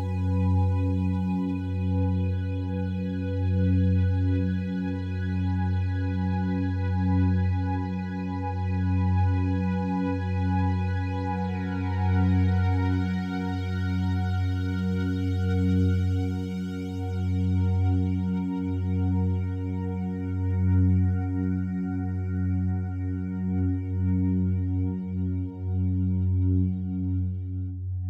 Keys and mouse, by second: 0.3-3.3 alt+drag, 4.6 click, 5.3-6.5 alt+drag, 7.4 alt+click, 8.1-10.0 alt+drag, 10.8 click, 11.4-17.1 alt+drag, 16.6 typing, 18.8 click, 20.7-24.8 drag, 25.5-26.7 alt+drag, 27.3-28.0 alt+drag.